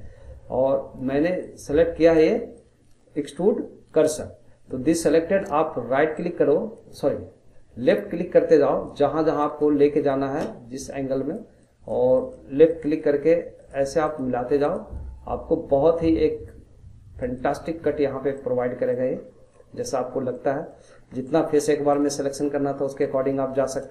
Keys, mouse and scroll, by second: 1.4-5.6 drag, 6.2-7.9 right drag, 7.9-11.9 drag, 12.1 click, 12.7 click, 13.6 click, 14.0 click, 14.6 click, 17.2 click, 17.7 scroll down 2, 18.3 middle click, 19.1 scroll up 4, 19.5 middle click, 20.1 scroll up 1, 20.3 middle click, 20.9 scroll down 3, 21.1 middle click, 21.7 scroll up 1, 21.9-23.9 middle drag.